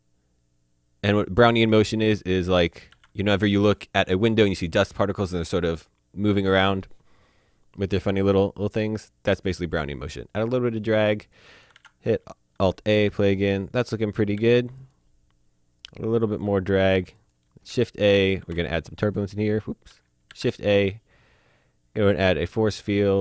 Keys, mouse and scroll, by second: 1.7 space, 2.2 click, 2.9 alt+a, 10.1 click, 11.8 a, 13.9 alt+Num_Lock, 14.4 alt+a, 14.8 click, 17.7 shift+z, 18.2 click, 18.4 z, 20.3 shift+a, 22.7 click.